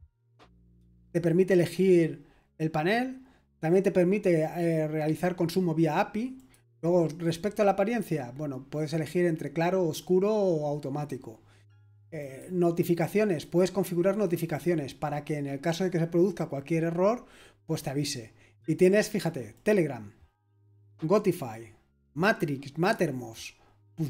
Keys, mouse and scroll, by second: 6.3 click, 12.2-13.7 drag, 19.5-21.9 drag.